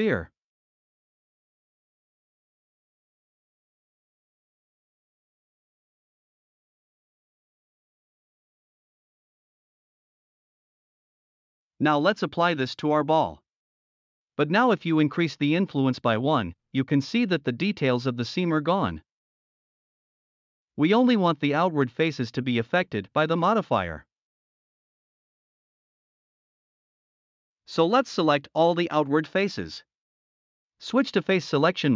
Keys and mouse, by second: 0.1 middle click, 1.7-2.5 middle drag, 2.9 middle click, 3.8-4.2 middle drag, 6.2 drag, 7.6 x, 8.2-8.5 shift+middle drag, 9.1-9.5 drag, 9.7 middle click, 11.8-13.3 drag, 14.7-16.6 middle drag, 17.1 middle click, 17.9-18.2 middle drag, 19.1-19.5 shift+middle drag, 19.7-20.2 middle drag, 22.1 click, 22.5 Tab, 22.7-23.1 middle drag, 23.3 Tab, 23.6 middle drag, 24.7 middle click, 25.0 middle drag, 25.9 shift+middle click, 28.7 click, 29.3 Tab, 29.8 middle drag.